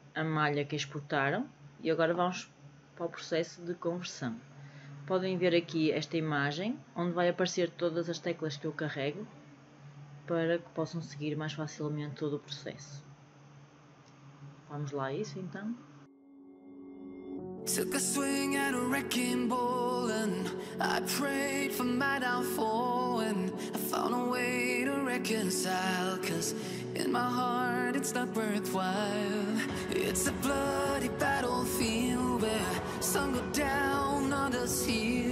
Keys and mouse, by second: 16.3 KP_5, 17.6-18.0 shift+middle drag, 18.7 middle click, 19.1 shift+click, 20.2 s, 21.1 click, 21.7 click, 23.2 click, 25.3-27.1 middle drag, 27.9 KP_5, 28.8 KP_1, 31.4 s, 33.1 click, 34.1 click, 34.6-35.3 middle drag.